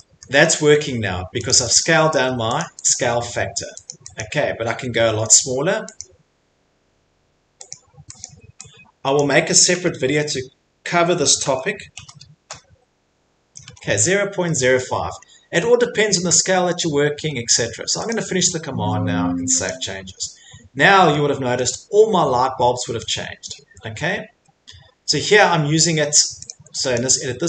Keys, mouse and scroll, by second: 0.0 Return, 0.2 middle click, 0.4 Escape, 0.6 Escape, 1.5 click, 1.8 click, 2.1 Escape, 2.4 Escape, 2.6 click, 2.9 click, 3.2 Escape, 3.3 middle click, 3.3 middle click, 3.9 click, 4.2 click, 4.7 Escape, 5.1 middle click, 5.6 click, 6.0 click, 7.7 click, 8.2 click, 9.1 click, 11.2-12.4 typing, 13.6 Escape, 13.9 middle click, 14.0 middle click, 14.8 middle click, 15.2 middle click, 15.2 middle click, 15.8 middle click, 18.1 click, 18.7 right click, 19.9 click, 21.6 middle click, 24.0 middle click, 24.1 middle click, 24.6 middle click, 24.6 middle click, 25.6 middle click, 26.5 click, 26.9 click.